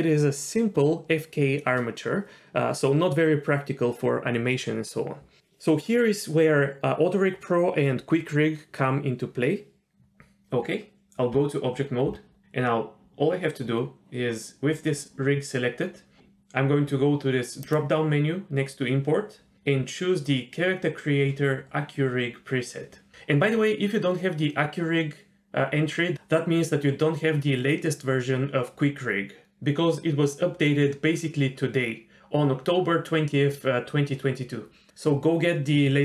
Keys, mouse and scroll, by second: 9.5 middle click, 11.3 Tab, 17.6-36.0 drag.